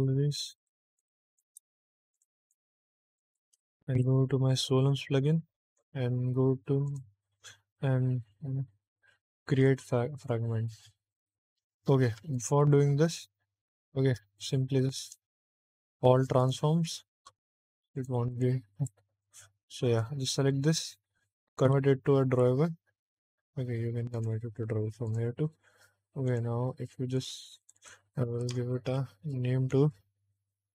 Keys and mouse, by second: 0.5 click, 0.8 click, 1.2 shift+click, 2.0 click, 2.3 click, 3.0 shift+click, 3.9 n, 5.6 click, 6.8 click, 9.5 click, 12.4 ctrl+z, 13.7 shift+middle click, 14.3 click, 14.9 ctrl+a, 16.8 click, 17.4 ctrl+a, 18.2 click, 18.7 ctrl+a, 19.9 click, 21.6 v, 24.1 click, 25.0 click, 26.2 click, 27.0 click, 27.5 click, 27.7-30.7 drag.